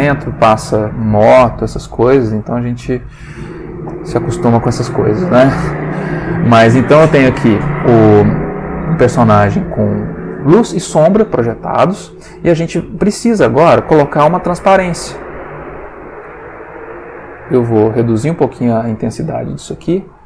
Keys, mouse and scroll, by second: 1.8-2.6 middle drag, 3.8 click, 5.3-6.1 middle drag, 6.6 middle click, 11.1 middle click, 11.7 ctrl+middle click, 14.8 middle click, 18.1 ctrl+click, 18.5 ctrl+click, 19.6 ctrl+shift+Left, 20.0 ctrl+shift+Right.